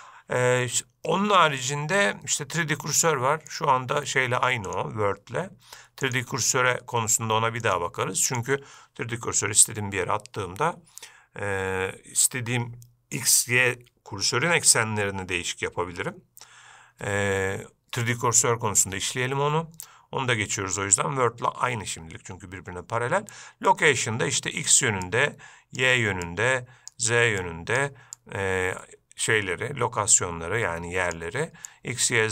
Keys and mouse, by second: 1.9-3.8 drag, 5.0 click, 7.9-8.6 drag, 23.9-24.9 drag, 25.2 click, 26.5 click, 27.7 click, 28.4-31.4 drag, 31.9 click.